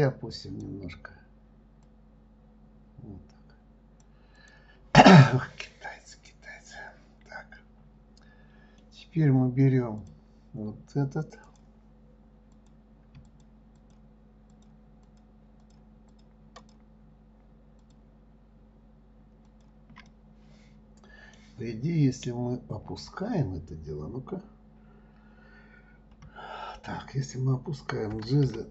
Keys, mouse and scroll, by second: 0.3 click, 2.2 click, 4.7 click, 5.6 middle click, 6.3-9.3 middle drag, 10.4 click, 11.8 click, 12.9 click, 13.6 shift+click, 14.2 shift+click, 14.9 shift+click, 15.4 shift+click, 16.0 shift+click, 16.5 shift+click, 17.0 shift+click, 18.2 shift+click, 19.8 shift+click, 20.5-23.5 middle drag.